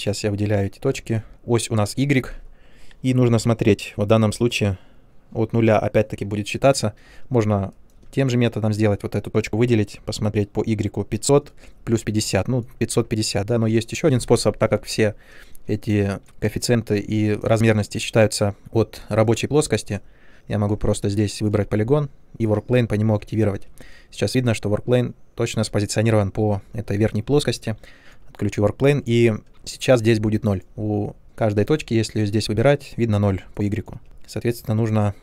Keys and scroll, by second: 20.7 3, 23.4 ctrl+1, 27.2 ctrl+1, 31.7 1, 33.9 1.